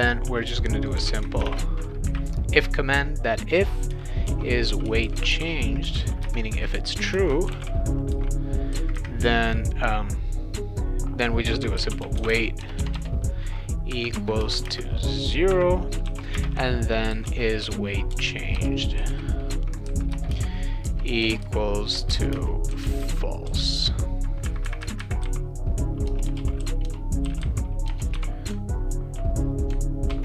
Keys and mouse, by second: 0.7-2.0 typing, 3.6-5.9 typing, 6.2 Return, 7.1 space, 7.5 shift+[, 7.6 shift+], 8.1 ;, 11.5-12.8 typing, 14.1 Return, 14.4-24.0 typing, 20.1 Return, 25.2-28.1 typing, 30.1 ctrl+s.